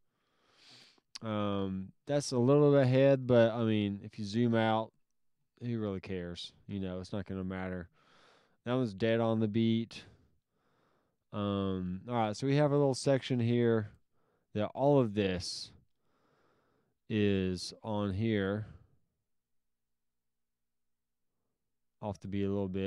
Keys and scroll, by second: 13.0 alt+s.